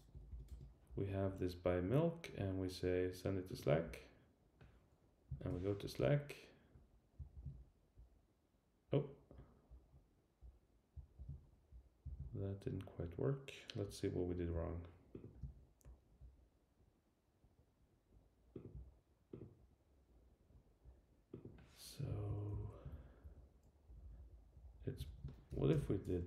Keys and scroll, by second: 0.1 Return, 22.1 Left, 23.0 Up, 23.8 Right, 24.6 Right.